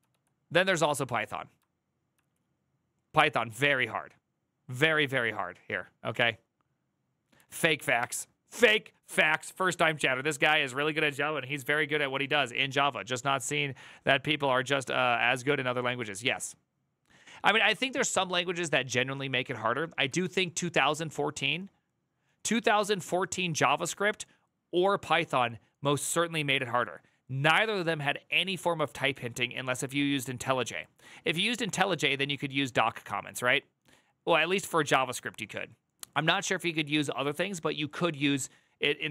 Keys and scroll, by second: 0.6 Tab, 7.7 alt+[, 19.8 alt+=.